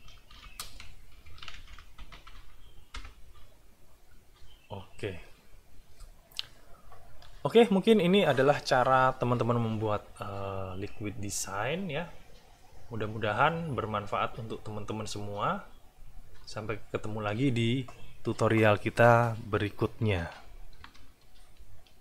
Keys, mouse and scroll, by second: 0.0-2.6 typing, 2.9 Return, 21.3 ctrl+shift+1.